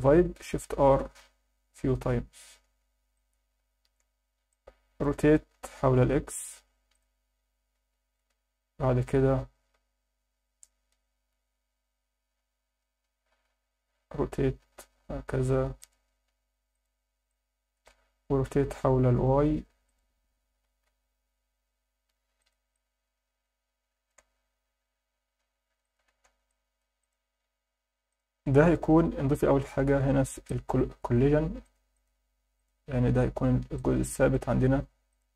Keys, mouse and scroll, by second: 0.8 shift+r, 1.1 shift+r, 1.4 shift+r, 1.8 shift+r, 2.6 Tab, 3.1-3.9 alt+middle drag, 4.2 scroll down 1, 4.5-5.0 alt+middle drag, 5.5 r, 5.9 x, 6.9 click, 7.9 KP_7, 8.3 KP_1, 9.7 KP_5, 13.4 KP_3, 14.6 r, 15.8 click, 16.3 g, 16.7 click, 17.0 scroll down 2, 17.3-17.8 alt+middle drag, 18.6 r, 19.1 y, 19.8 click, 20.5 r, 20.8 x, 22.4 click, 22.7-24.1 alt+middle drag, 24.3-25.1 scroll down 1, 25.1 r, 25.4 y, 25.8 click, 26.1 alt+a, 26.5-26.8 alt+middle drag, 27.0 click, 27.6 scroll up 1, 28.1 click, 30.5 click, 31.6 click, 31.9 click, 32.6 click, 33.7 click, 35.1 click.